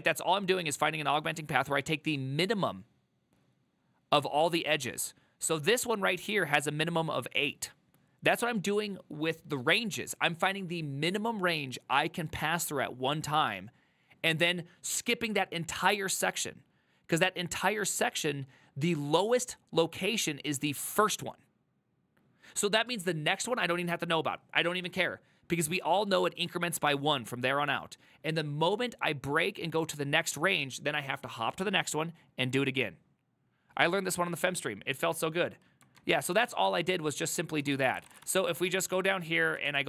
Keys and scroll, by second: 36.1 alt++, 36.6 alt+{, 37.7 ctrl+c, 37.8 ctrl+c, 37.8-38.6 typing, 38.7 ctrl+d, 39.7 ctrl+d.